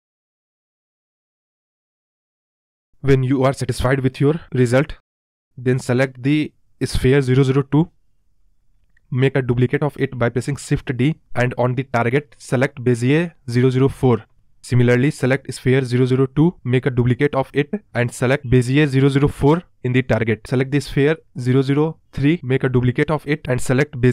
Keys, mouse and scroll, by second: 1.8-2.6 scroll down 5, 2.6-3.0 scroll up 4, 3.4-4.5 scroll down 7, 3.6 middle drag, 4.5 click, 5.0 space, 5.3 space, 6.1 click, 11.1 shift+d, 13.4-15.7 drag, 16.4 shift+d, 18.6-19.9 drag, 20.7 shift+d, 22.5-23.9 drag, 23.9-24.1 scroll up 15.